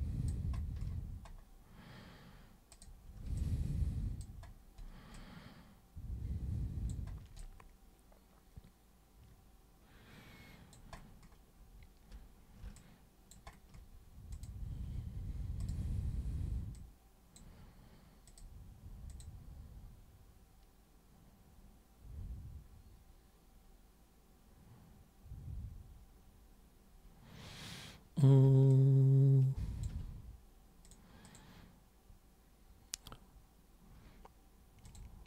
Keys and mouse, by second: 2.8 super+click, 3.4 alt+super+click, 5.2-6.9 alt+super+drag, 7.4-10.8 alt+super+drag, 12.8 alt+super+click, 14.3-15.7 super+drag, 16.8 super+click, 18.3 super+click, 19.1 super+click, 28.7-29.9 alt+super+drag, 30.9 super+click, 31.3 super+click, 34.9 super+click.